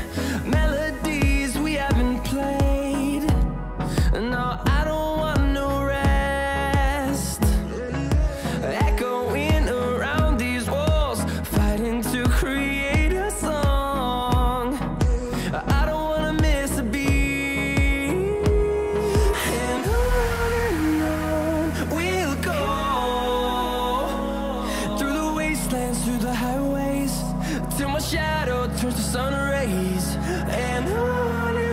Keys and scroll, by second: 0.0-2.6 typing.